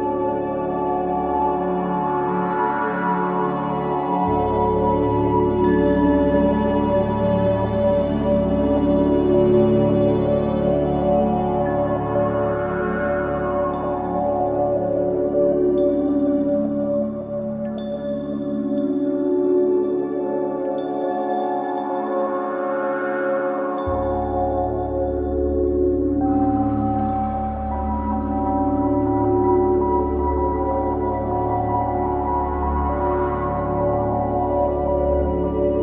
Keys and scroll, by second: 3.1-4.1 typing, 6.1 space, 6.6 shift+F2, 7.3 F3, 13.2 space, 13.5 F4, 14.3 F3, 16.0 F2, 20.4-21.6 typing, 28.2 ctrl+r, 33.5 F3.